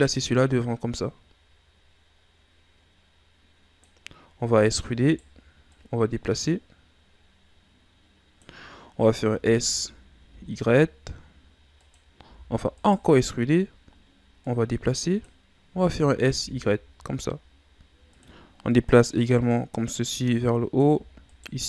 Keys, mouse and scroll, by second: 0.4 click, 4.5 e, 5.7 click, 9.3 s, 12.2 e, 13.1-14.4 ctrl+scroll up 7, 14.4 click, 15.7 s, 18.7 click, 21.2 alt+right click.